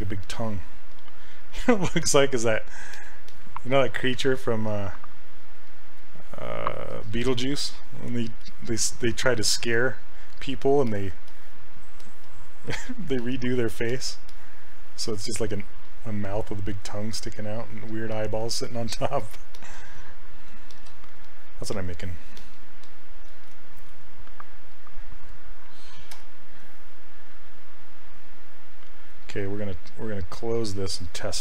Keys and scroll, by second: 26.2 r.